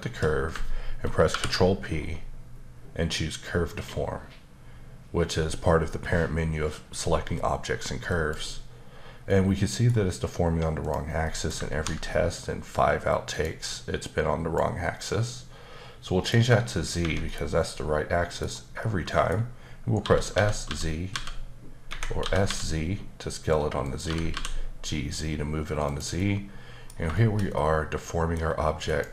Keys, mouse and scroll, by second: 1.3 ctrl+p, 8.1 click, 9.3 middle click, 10.8 click, 11.2 middle click, 13.3 click, 14.0 click, 16.2 click, 17.0 Escape, 17.3 middle click, 18.8 middle click, 20.0-21.1 typing, 21.9 Escape, 22.2 typing, 23.8 click, 24.0-24.3 typing, 25.8 click, 26.2 middle click, 27.1 shift+middle click, 28.9 click.